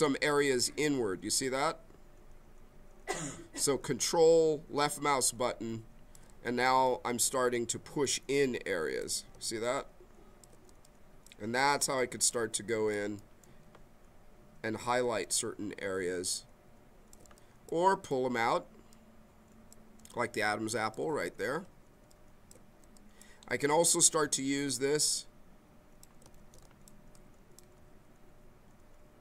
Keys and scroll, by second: 26.3 ctrl+z.